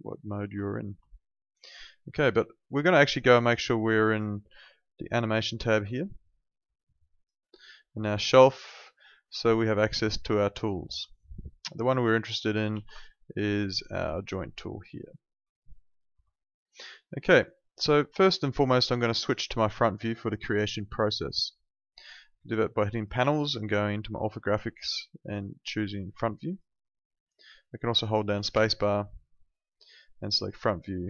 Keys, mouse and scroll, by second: 0.6 ctrl+4, 4.4 ctrl+2, 10.9 Escape, 12.7 ctrl+2, 16.1 Escape, 18.2 alt+click, 18.8 alt+middle click, 19.0 alt+right click, 19.3 alt+click, 22.9 click, 26.4 click, 27.9 alt+middle click, 28.5 space, 30.1 click.